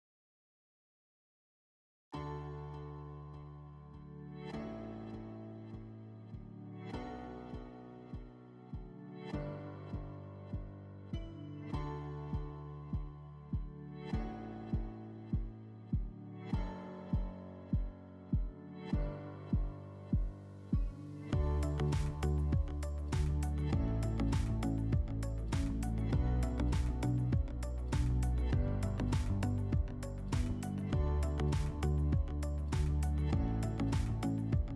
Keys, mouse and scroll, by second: 8.1 middle click, 9.1 click, 10.6 click, 12.4 click, 13.5 scroll, 14.6 click, 16.1 click, 20.3-21.9 drag, 26.4 click, 27.3 scroll, 27.9 click, 32.8 click.